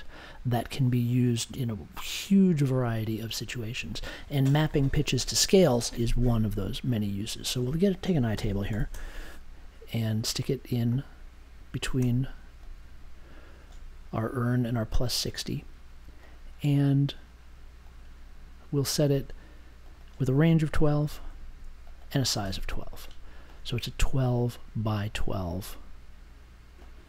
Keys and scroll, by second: 8.0-9.4 typing, 20.8-21.6 typing.